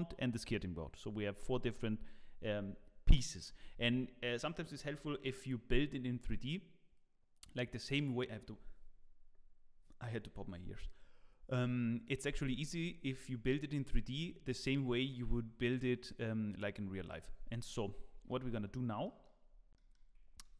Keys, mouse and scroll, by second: 18.5 z.